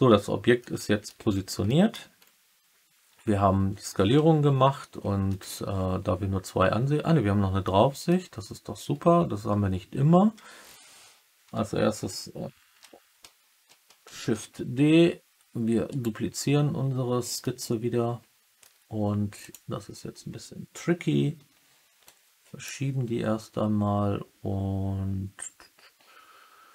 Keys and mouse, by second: 0.7 middle drag, 1.6 middle drag, 4.6 KP_3, 5.2 KP_1, 7.6-8.0 middle drag, 14.1 shift+d, 15.8 right click, 17.3 alt+drag, 17.5-18.5 alt+middle drag, 19.3 click, 22.0 click.